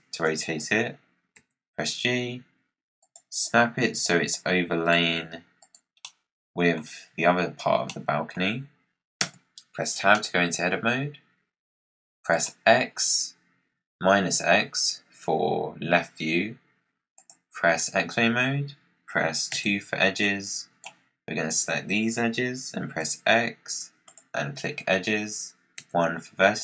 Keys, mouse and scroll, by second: 1.3 g, 3.2-3.6 scroll up 4, 3.8 scroll up 1, 3.9 g, 5.1 g, 5.9 scroll up 1, 6.0-6.8 middle drag, 6.8-7.8 scroll down 3, 7.8-9.1 middle drag, 9.1 Tab, 10.1-12.2 middle drag, 12.2 click, 17.1 click, 18.0-18.5 scroll up 3, 19.4 2, 20.1 click, 22.9 x, 25.7 1, 26.5 click.